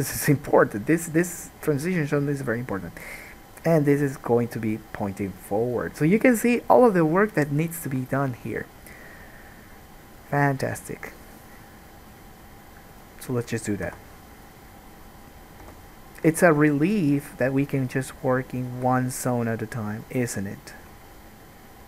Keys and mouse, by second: 14.0 Tab, 15.9 3, 16.0-17.6 drag, 17.7-21.8 shift+drag, 18.3 shift+middle click, 18.3 shift+right click, 18.8 shift+middle click, 18.8 shift+right click, 21.3-21.8 shift+middle drag, 21.3-21.8 shift+right drag.